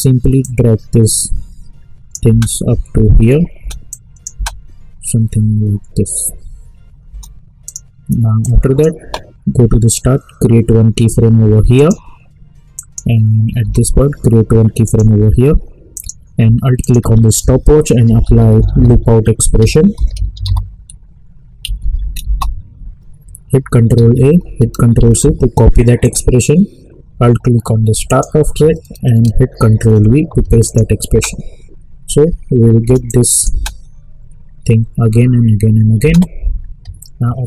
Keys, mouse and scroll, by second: 0.4-2.2 drag, 2.2 space, 3.9 click, 4.3 space, 7.0 space, 7.6-11.7 drag, 13.6 k, 14.8 click, 17.8-21.2 typing, 19.6 ctrl+a, 21.6 Down, 22.2 Return, 23.9 ctrl+a, 25.0 ctrl+c, 26.0 click, 29.8 ctrl+v, 30.6 click, 31.0 space, 33.0 click, 33.5 space, 36.0 space.